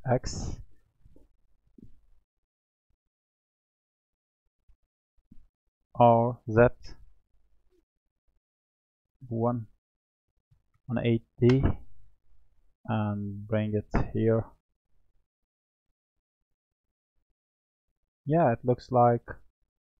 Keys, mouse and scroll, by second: 2.5 click, 3.5 click, 4.8 click, 5.9 r, 9.2-12.2 drag, 13.5 click, 14.8 drag, 15.4-16.3 scroll down 2, 16.3 click, 17.2 click.